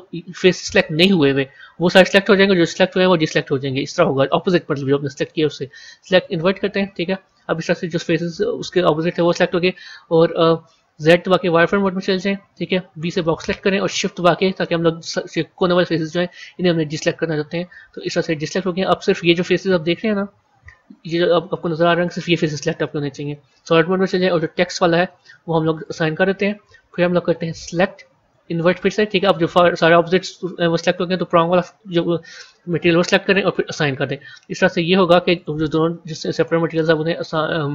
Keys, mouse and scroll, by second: 5.3-7.1 drag, 7.1-9.9 middle drag, 9.9 KP_1, 11.0 z, 12.9 b, 18.5-22.5 middle drag, 22.5 z, 25.7-30.7 drag, 31.0 click, 33.5 click, 34.5 z, 37.4 Tab.